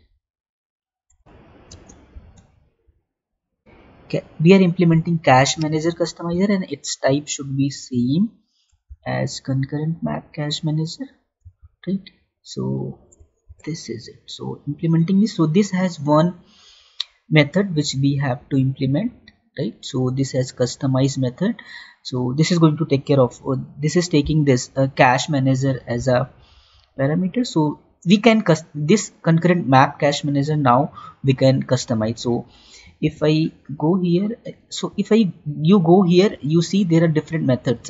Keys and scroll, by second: 1.6 space, 2.0 ctrl+v, 8.8 ctrl+c, 11.5 ctrl+v, 25.9 ctrl+c, 33.2 ctrl+c.